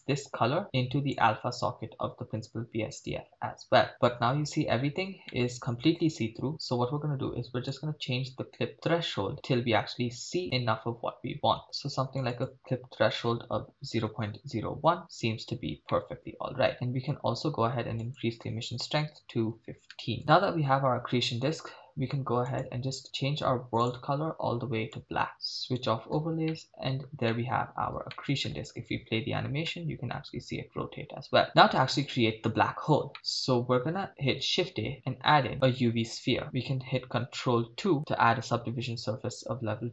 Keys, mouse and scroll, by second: 0.0-1.3 drag, 3.9-5.0 middle drag, 5.3-5.7 shift+middle drag, 7.7-14.7 drag, 15.9-17.1 middle drag, 18.0-20.2 drag, 20.2 middle click, 22.5 click, 23.8 click, 25.7 click, 26.6-27.0 shift+middle drag, 27.3 middle click, 28.1-28.5 shift+middle drag, 29.0 shift+space, 29.7 middle click, 31.5 middle click, 31.8 shift+space, 33.1 middle click, 34.2 shift+a, 37.9 ctrl+2.